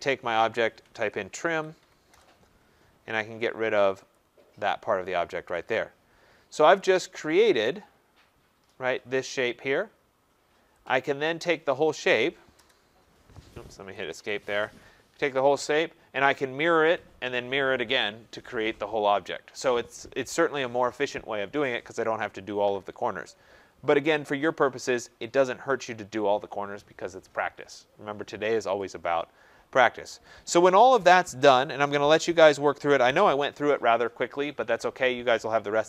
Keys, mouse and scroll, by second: 0.8-2.0 typing, 4.1 click, 4.9-5.6 scroll, 5.6 click, 6.1 scroll, 6.2 middle click, 6.7 click, 7.6 right click, 7.8 middle click, 7.9 middle click, 8.0 middle click, 10.8 click, 11.5 click, 12.5 Return, 13.7 Escape, 14.0 Escape, 14.1 Escape, 15.3 click, 24.3-25.2 scroll, 25.2 scroll, 25.3 middle click, 25.4 middle click, 25.5 middle click, 29.7 middle click.